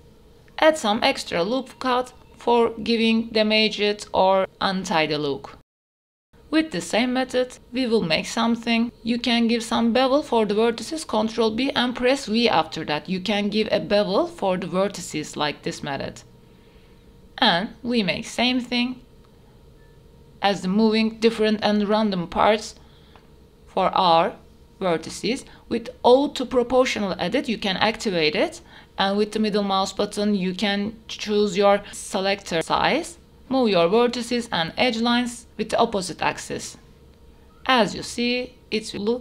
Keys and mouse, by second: 0.4 s, 3.2 s, 5.1 ctrl+z, 5.4 click, 5.7 Tab, 6.1 ctrl+r, 6.2 Tab, 6.7 Tab, 7.2 1, 8.9 ctrl+b, 9.3 v, 11.9 middle click, 12.9 g, 13.1 y, 14.1 middle click, 14.3 Tab, 14.9 middle click, 15.1 click, 15.3 middle click, 15.5 Tab, 16.2 shift+middle click, 16.5 middle click, 17.5 shift+middle click, 18.3 click, 18.6 g, 18.9 z, 19.5 click, 20.8 g, 22.6 middle click, 23.2 y, 23.5 click, 23.6 Tab, 23.7 click, 23.8 Tab, 23.9 click, 24.1 Tab, 24.1 Tab, 24.2 click, 24.4 click, 24.7 g, 24.8 z, 25.4 click, 25.6 click, 25.7 ctrl+z, 25.9 ctrl+z, 26.1 click, 26.3 middle click, 26.8 click, 27.1 shift+click, 27.2 g, 27.6 z, 28.7 click, 29.1 g, 29.2 z, 29.5 click, 30.5-33.5 typing, 30.9 click, 31.1 click, 31.6 click, 32.3 click, 33.8 click, 34.8 g, 34.8 z, 35.4 g, 35.5 y, 35.7 click, 35.7 Tab, 35.9 middle click, 36.1 shift+middle click, 36.3 Tab, 36.5 click, 36.7 click, 36.9 g, 37.0 x, 37.2 click, 37.3 Tab, 37.4 click, 37.4 right click, 37.7 Tab, 37.9 shift+click, 38.1 click, 38.3 g, 38.3 z, 38.7 click, 39.0 click.